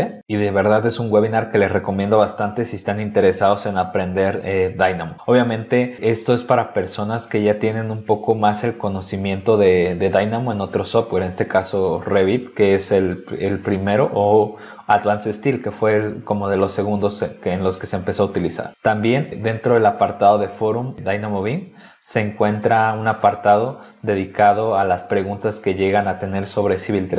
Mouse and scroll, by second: 19.2-19.5 scroll up 2, 22.5 scroll down 2, 23.1-24.6 scroll down 8, 25.5-26.5 scroll down 6.